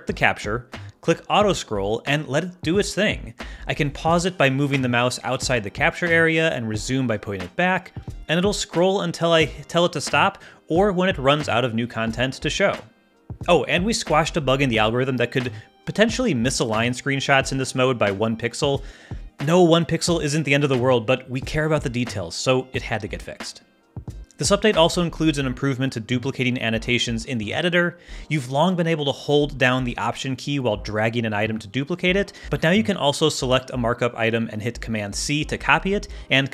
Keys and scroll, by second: 34.7 super+c.